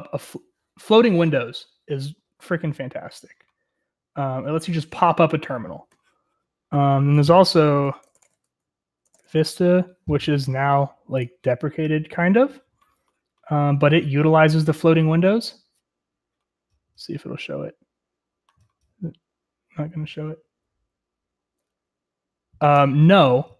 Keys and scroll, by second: 7.9-9.9 typing.